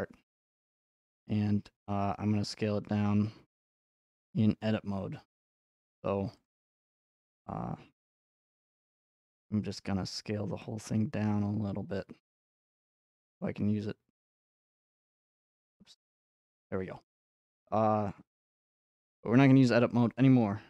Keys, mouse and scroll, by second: 1.6 scroll, 2.0 middle click, 5.8-8.5 drag, 8.9-11.0 drag, 15.5 right click, 15.8 scroll, 16.7 scroll, 18.7 Tab, 19.7 scroll, 20.0-20.6 middle drag.